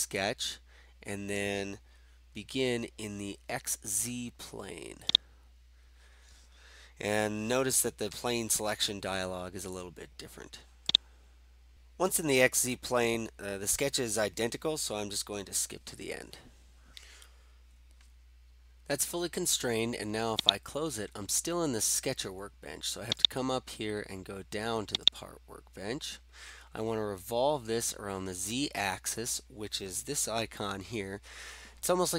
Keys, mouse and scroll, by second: 11.0 click, 20.4 click, 23.3 click, 24.2 click, 25.0-26.2 drag.